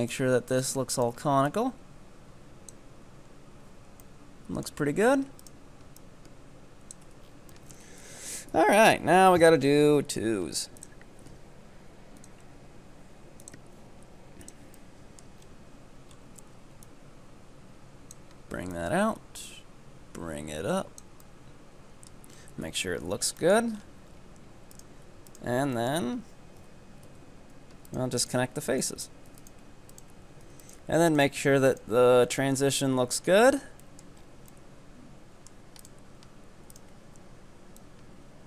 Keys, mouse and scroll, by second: 0.5 right click, 1.0 ctrl+right click, 1.5-3.4 drag, 3.4 scroll down 1, 3.7 z, 4.0 middle click, 4.9 Tab, 5.2 Tab, 5.4 right click, 6.0-7.1 drag, 7.1 Tab, 7.3 scroll down 7, 7.5-8.1 middle drag, 8.1 KP_2, 8.5 KP_3, 8.7 Tab, 9.1 scroll down 4, 9.3 shift+middle click, 9.7-10.8 scroll up 3, 10.8-14.8 drag, 14.8 middle click, 15.5-16.1 scroll up 4, 16.1-16.8 scroll up 3, 16.8-21.2 drag, 21.2-22.4 middle drag, 22.4 scroll down 6, 22.7 KP_3, 23.3 scroll down 1, 23.4 shift+middle click, 23.8-24.8 scroll up 8, 24.8 right click, 25.3 ctrl+right click, 25.8-27.1 shift+middle drag, 27.1 b, 28.2 right click, 28.7 ctrl+right click, 29.3 f, 29.5 right click, 29.9 ctrl+right click, 30.5 f, 30.7 right click, 31.1 ctrl+right click, 31.6 f, 31.8 right click, 32.1 Tab, 32.2 scroll down 4, 32.4-33.6 middle drag, 33.6 Tab, 33.9-34.2 middle drag, 34.2-34.5 scroll up 4, 34.5-35.9 middle drag, 35.9 right click, 36.2-36.8 ctrl+scroll up 1, 36.8 ctrl+right click, 37.0 scroll up 2, 37.8-38.4 drag.